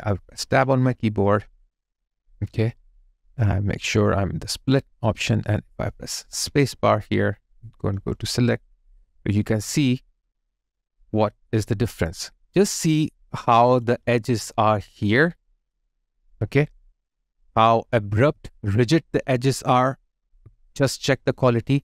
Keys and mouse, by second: 0.5 Tab, 6.3 space, 9.1 alt+right click, 10.1 alt+middle click, 14.4 alt+click, 16.7 alt+right click, 18.7 alt+right click, 19.4 alt+middle click, 20.8 alt+right click, 21.3 alt+middle click.